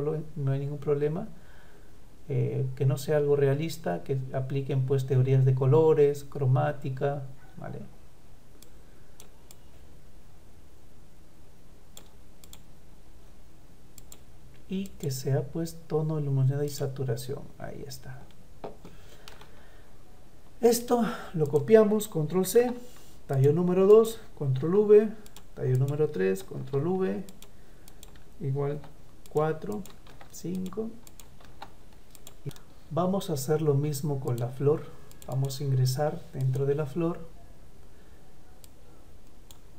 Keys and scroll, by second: 22.5 ctrl+c, 24.6 ctrl+v, 25.4 ctrl+v.